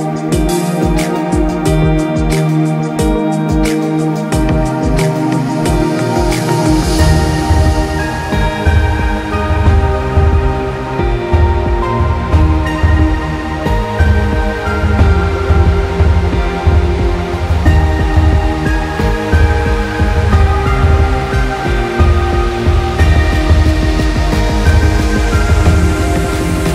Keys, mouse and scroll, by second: 0.2 scroll up 1, 1.4 click, 2.3 click, 2.8 scroll down 1, 3.2 click, 3.7 scroll down 1, 4.2 click, 4.7 scroll up 1, 5.0 click, 6.3 scroll down 1, 6.5 click, 6.7 scroll up 1, 7.1 click, 7.6-7.9 scroll up 3, 7.9-9.0 typing, 7.9 click, 8.4 click, 8.8 click, 10.2 scroll up 1, 10.4 click, 10.6-11.2 scroll down 3, 10.7 click, 11.0 click, 11.3 click, 11.9 scroll down 1, 12.1 click, 12.8-13.3 scroll up 2, 13.3 alt+scroll down 1, 13.4 scroll up 1, 13.7 click, 13.8 space, 14.0 click, 20.6 ctrl+g, 21.0 click, 21.4 click, 21.7 space, 21.9 scroll up 1, 22.0 click, 23.3 click, 25.2 click, 25.7 space, 26.1 click.